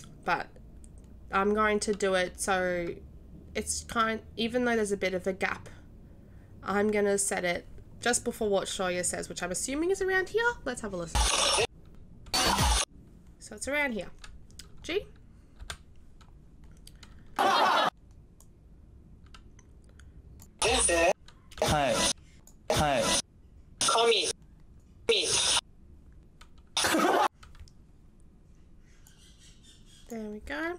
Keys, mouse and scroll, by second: 7.3-8.0 right drag, 11.1 w, 12.3 d, 16.4 g, 17.3 d, 18.4-20.5 right drag, 20.6 d, 21.6 w, 22.3 right click, 22.6 d, 23.8 w, 24.7 right click, 25.0 d, 26.7 w, 29.0 right click, 30.2 right click.